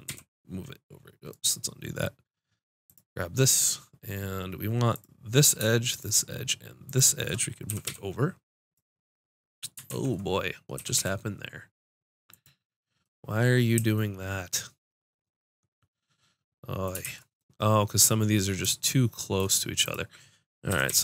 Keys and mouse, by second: 2.8-4.3 drag, 2.8 right click, 7.6 g, 8.0 click, 9.8 ctrl+z, 10.7 g, 17.0 ctrl+z, 19.8 click, 20.7 g.